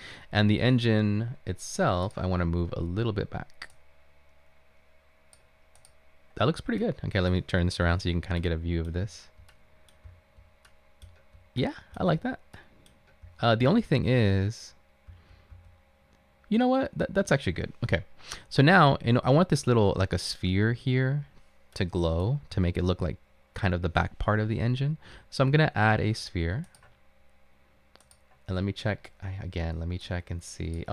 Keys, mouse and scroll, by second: 8.0 typing, 9.1 typing, 10.1-12.0 typing, 13.3-14.2 typing, 15.2-15.6 typing, 19.0-19.8 typing, 22.6-23.0 typing.